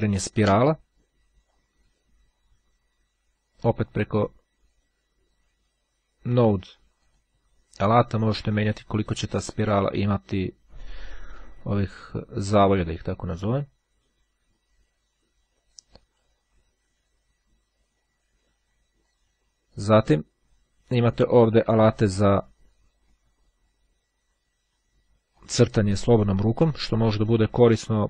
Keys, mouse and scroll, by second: 0.3-2.2 drag, 7.0 click, 8.6-11.8 drag, 12.6-16.3 drag, 18.6-19.8 drag, 21.2-21.7 scroll down 1, 25.3 click.